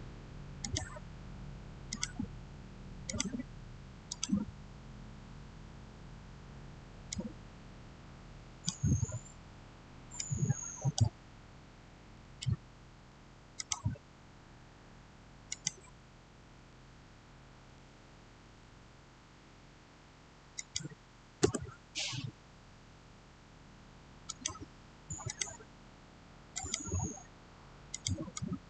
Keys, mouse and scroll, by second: 0.5 click, 7.0-13.0 drag, 13.4 click, 17.6 6, 18.3 Return, 20.4 click, 21.3 Return, 24.2-28.6 drag.